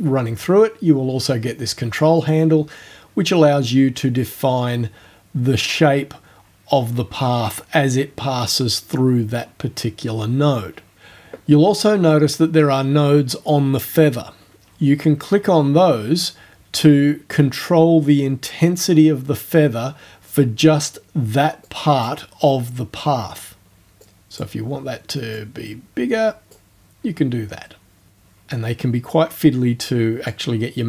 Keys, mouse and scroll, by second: 2.2-11.0 drag, 15.3-17.5 drag, 21.7 click, 24.1 click, 25.4-26.7 drag, 28.1-30.5 drag.